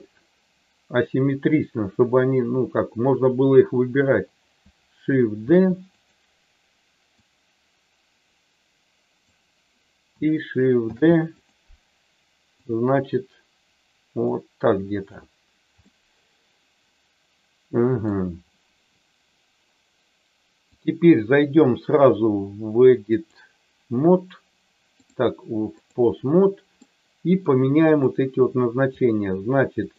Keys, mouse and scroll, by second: 5.4 shift+d, 5.9 click, 7.1-9.2 drag, 10.9 shift+d, 11.3 click, 12.7-15.1 drag, 15.8-18.2 middle drag, 20.7-23.4 drag, 25.2 click, 26.8 middle click, 27.9 click, 29.8 shift+click.